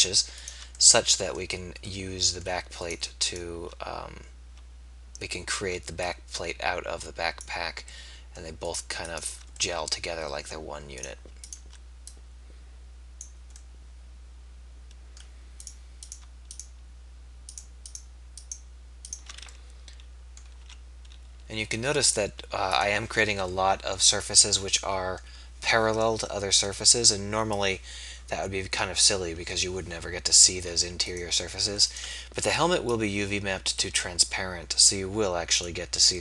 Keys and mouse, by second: 3.1 shift+right click, 8.1 middle click, 9.8 middle click, 10.8 middle click, 13.9-15.4 middle drag, 15.6 middle click, 19.6 middle click, 21.2 e, 24.0 middle click, 24.8-27.6 middle drag, 30.0 middle click, 31.2 middle click.